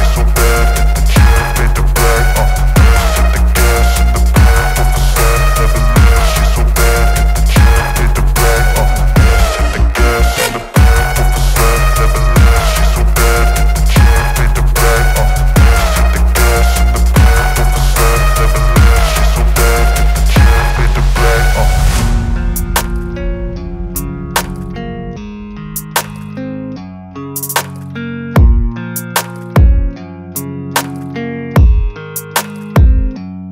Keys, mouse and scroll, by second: 1.5 alt+click, 6.9-8.9 typing, 9.9 ctrl+a, 12.5 click, 19.2 click, 20.6 v, 20.9 ctrl+t, 23.6-26.7 alt+drag.